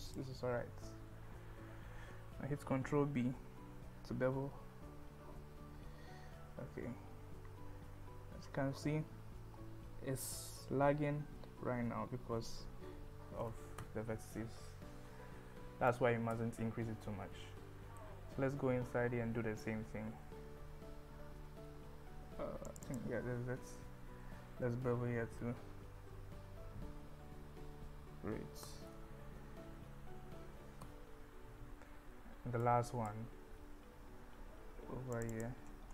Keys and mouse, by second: 0.1 click, 2.7 ctrl+b, 7.3 KP_Subtract, 12.6 KP_Add, 15.9 click, 18.0-19.6 middle drag, 20.1 KP_1, 22.7 click, 22.9 click, 25.3 ctrl+b, 29.2 g, 29.7 z, 32.7 click, 35.2 click, 35.4 click.